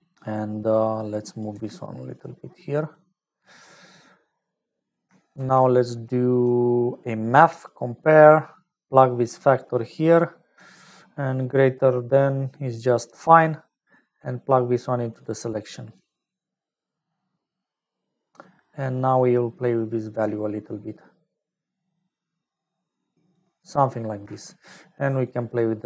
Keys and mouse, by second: 1.0 click, 1.5 g, 2.9-4.1 drag, 4.7 middle click, 5.3 shift+a, 9.0-10.6 drag, 12.9 click, 13.7 middle click, 14.8-16.0 drag, 16.7 middle click, 19.6-23.3 drag, 25.2-25.8 shift+drag.